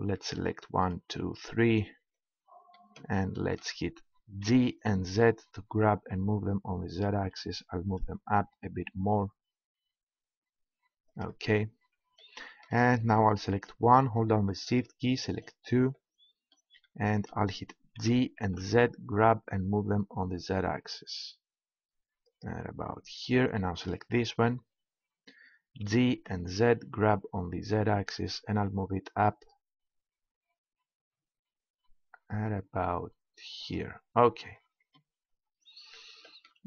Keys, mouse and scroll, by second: 2.8 click, 3.3-4.5 middle drag, 4.5 g, 11.1-13.0 drag, 13.5-16.4 right drag, 16.4 middle click, 17.9 g, 22.4-23.8 drag, 25.8 g, 33.7-36.0 drag, 35.6 middle click.